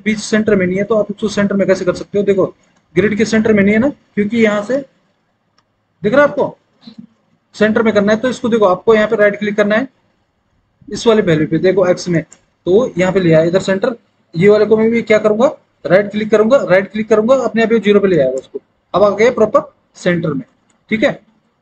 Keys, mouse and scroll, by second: 1.3 alt+w, 2.9 alt+w, 20.9 alt+w.